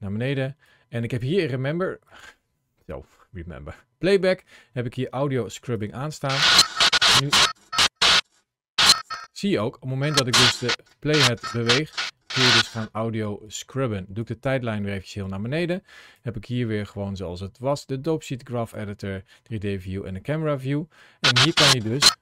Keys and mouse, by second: 0.4 click, 1.9-5.4 drag, 5.5 click, 6.2-9.3 drag, 9.9 click, 11.1-12.6 drag, 13.3 click, 15.2 click, 17.7 click, 21.2-22.2 drag.